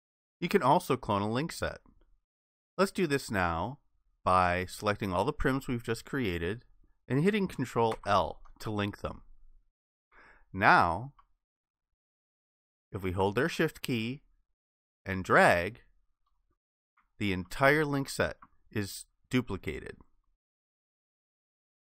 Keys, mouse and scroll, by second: 7.9 ctrl+i, 11.2 alt+click, 15.2 shift+click, 17.4 alt+click, 20.2 shift+click.